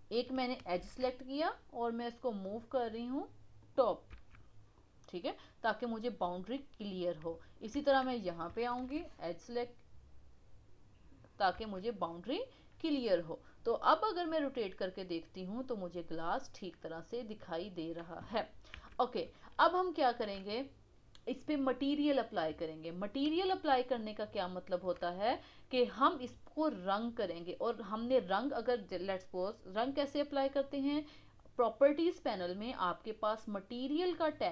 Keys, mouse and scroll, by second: 0.7 ctrl+r, 4.1 Tab, 4.4 scroll down 4, 4.7-6.9 middle drag, 6.9-7.3 scroll up 1, 7.3-7.7 middle drag, 7.7 Tab, 12.8-16.9 middle drag, 17.5-18.7 middle drag, 18.7 KP_1, 19.5-27.1 shift+middle drag, 34.3 click.